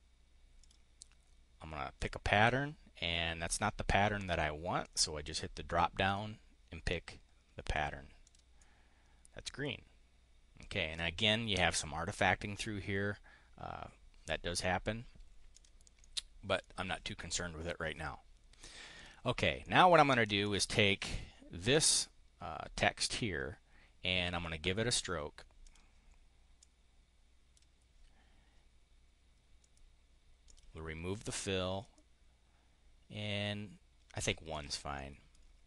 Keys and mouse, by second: 0.5 click, 1.8 click, 4.7 click, 6.0 click, 7.6 click, 8.0 click, 8.4 click, 15.4 click, 16.0 click, 18.9 click, 19.6 click, 20.3 click, 24.3 click, 24.4 right click, 25.6 click, 26.6-27.6 drag, 29.6 right click, 30.5 right click, 34.2 click, 34.4 click, 34.9 click.